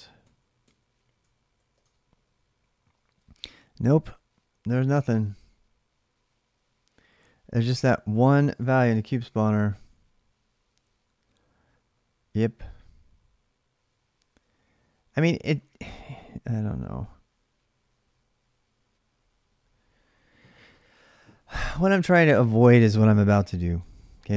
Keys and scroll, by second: 0.0-2.1 typing, 22.7-24.3 typing.